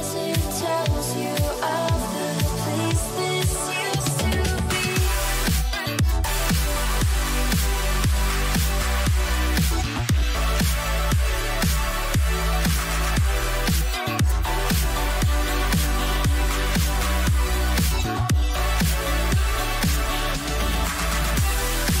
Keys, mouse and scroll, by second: 9.1-14.1 middle drag, 19.8-22.0 middle drag, 19.8 a, 20.5 a, 20.8 a.